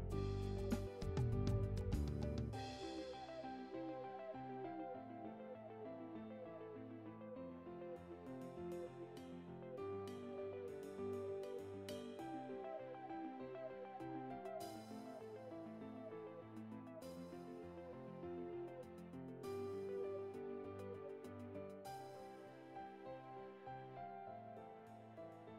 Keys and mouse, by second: 1.8 right click, 3.1 right click, 3.9 right click, 4.9 right click, 5.4 right click, 6.2 right click, 6.8 right click, 19.3 right click.